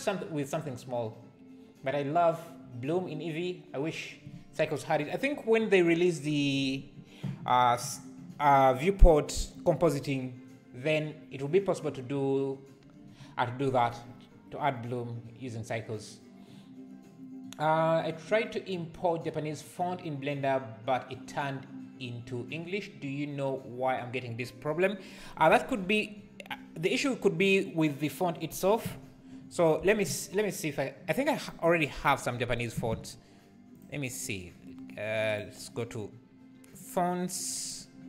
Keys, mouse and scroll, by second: 32.6 shift+right click, 32.7 shift+a, 37.8 click.